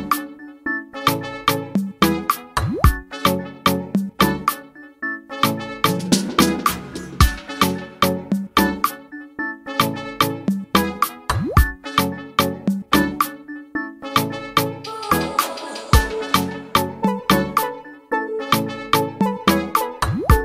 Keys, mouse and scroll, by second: 0.9 click, 1.9 click, 2.6 click, 2.8 scroll up 2, 3.4-4.6 drag, 5.2 click, 6.3 click, 8.0 scroll down 2, 9.6 click, 10.3 click, 10.7 scroll up 2, 10.8 scroll down 1, 11.7-13.7 drag, 14.9 click, 16.0 scroll up 2, 17.9-19.8 drag.